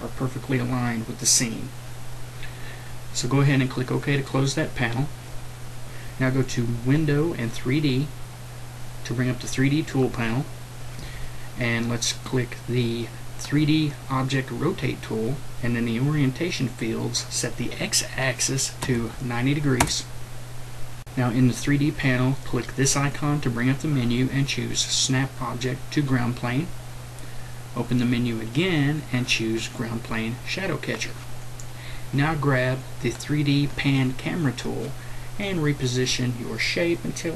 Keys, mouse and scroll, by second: 3.4-9.0 drag, 11.0-14.0 drag, 15.0-18.1 drag, 18.8 KP_9, 22.8-37.3 drag.